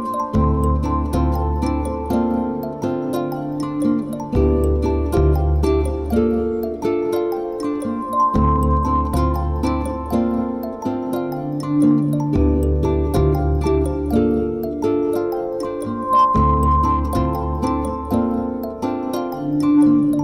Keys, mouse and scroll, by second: 0.4 alt+shift+click, 1.6 e, 7.1 click, 7.4 middle click, 10.7 KP_1, 11.4 g, 12.6 click, 13.5 e, 17.5 click, 17.7 shift+middle click, 19.6 middle click.